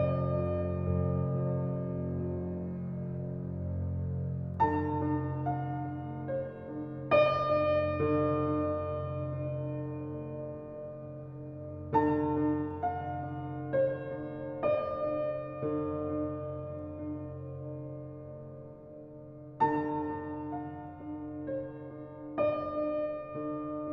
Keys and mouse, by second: 4.1 click, 4.9 g, 7.9 click, 8.9-9.5 drag, 10.5 click, 11.3 Tab, 11.7 click, 12.8 s, 13.3 g, 17.1 Tab, 18.4 click, 21.6 Tab, 23.3 click.